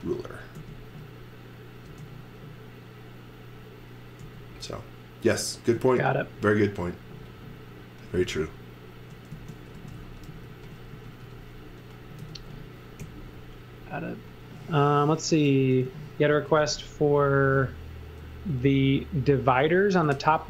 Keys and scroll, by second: 0.0-0.5 typing, 1.8 space, 4.2 m, 9.3-12.2 typing, 12.9 Up, 14.0 Up, 15.5-18.0 typing, 20.0 z.